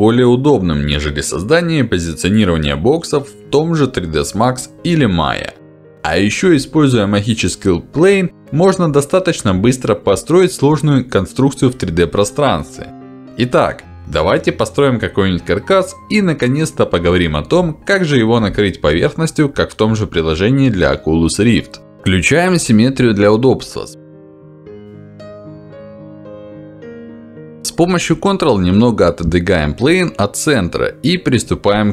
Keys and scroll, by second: 19.8 ctrl+z, 21.5 Escape, 23.7 Escape, 27.1 ctrl+z.